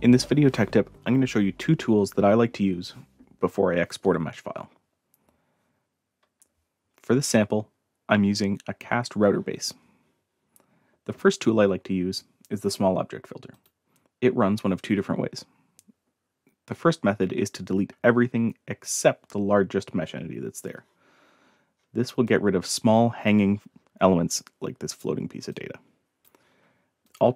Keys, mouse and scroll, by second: 13.5 click, 21.4-22.2 scroll up 6, 22.2-23.2 drag, 23.7 scroll up 2, 25.5-26.2 drag, 27.0 click.